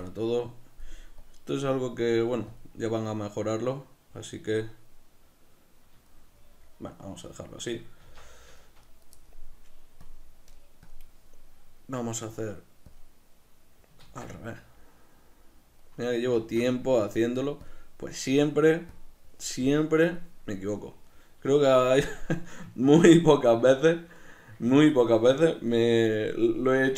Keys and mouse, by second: 1.3-4.7 drag, 4.7-8.3 middle drag, 8.1 Tab, 8.3 b, 10.1 click, 16.1 middle click, 16.7 ctrl+z, 17.1 click, 21.2-26.9 middle drag.